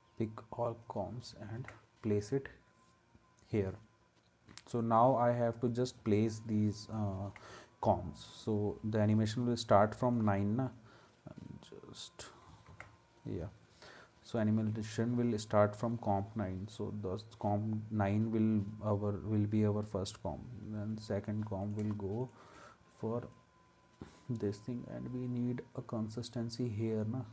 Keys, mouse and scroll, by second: 1.5 ctrl+s, 7.2 ctrl+s, 12.7 ctrl+s.